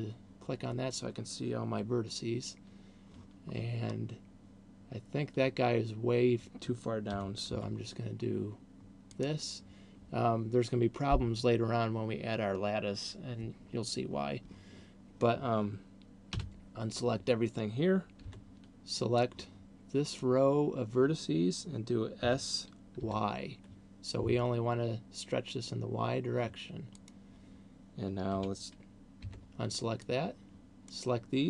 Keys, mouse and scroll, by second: 3.7-5.4 scroll down 3, 7.4 g, 9.4 click, 16.4 a, 18.4 b, 22.4 s, 27.4 click, 28.7 a, 29.4 b.